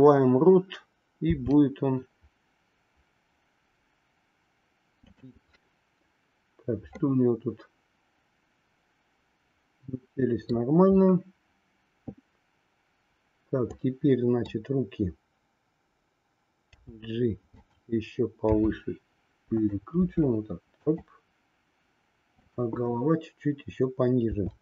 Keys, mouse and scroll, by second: 1.3 r, 6.9-10.6 middle drag, 13.7 click, 18.6 r, 22.3-23.7 drag, 24.2 r.